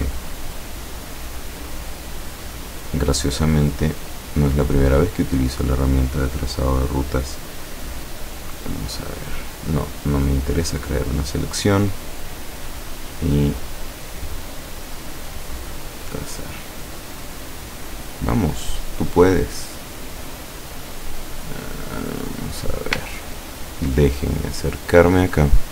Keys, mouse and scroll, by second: 1.8 click, 2.8 click, 4.0 click, 5.1 click, 8.3 click, 10.6 click, 12.1 click, 12.9 click, 13.2 click, 15.6 click, 21.1-21.5 scroll down 2, 21.7 scroll up 2, 22.3-22.7 scroll down 2, 23.3-23.7 ctrl+scroll up 2, 24.4-25.1 ctrl+scroll up 5, 25.4-25.7 scroll up 2.